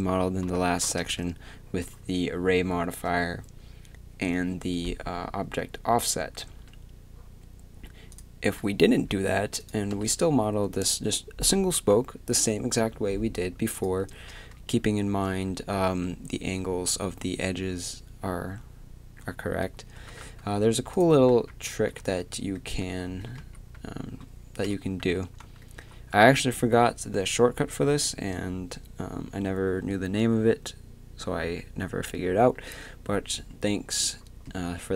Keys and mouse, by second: 1.0 Tab, 6.5 Tab, 8.1-9.6 drag, 9.6-12.7 right drag, 9.9 x, 13.7-15.2 drag, 14.1 Tab, 15.2 z, 19.9 a, 20.2 a, 21.3-23.5 typing, 24.6 KP_3, 25.0 a.